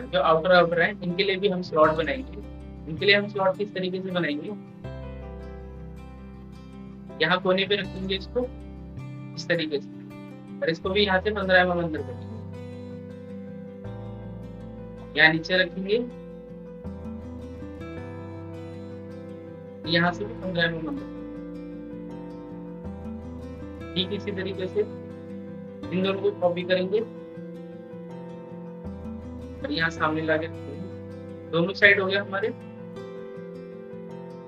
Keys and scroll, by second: 25.7 ctrl+z.